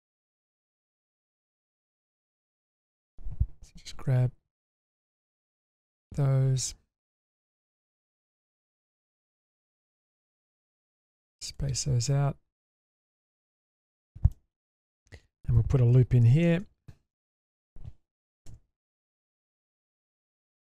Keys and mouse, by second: 0.9 g, 2.4 middle click, 2.8 shift+middle click, 4.1 2, 4.7 click, 5.4 ctrl+click, 7.0 shift+click, 9.0 shift+click, 10.7 ctrl+shift+click, 12.9 click, 13.9 middle click, 14.3 shift+middle click, 16.4 ctrl+r, 18.5 k.